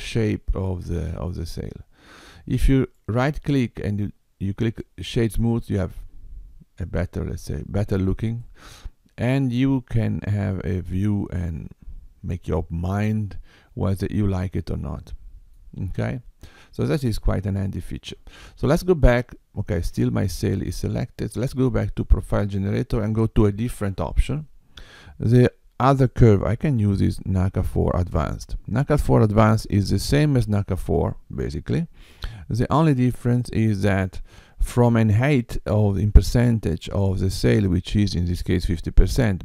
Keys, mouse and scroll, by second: 2.7 right click, 5.8 middle click, 7.6-8.4 scroll up 2, 8.4 middle click, 16.3-17.3 scroll down 2, 20.4 click, 22.1 click, 25.9 click.